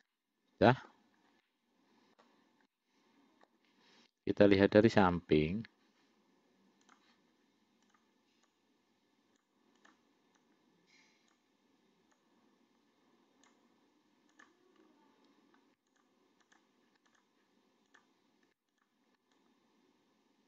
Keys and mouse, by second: 0.3 middle click, 1.7 middle click, 2.9 middle click, 7.1 click, 8.8 click, 10.1 click, 10.7-11.7 drag, 12.4-13.9 drag, 14.6 click, 16.2 shift+click, 16.8 shift+click, 17.4 click, 18.2 click, 19.7-20.4 drag.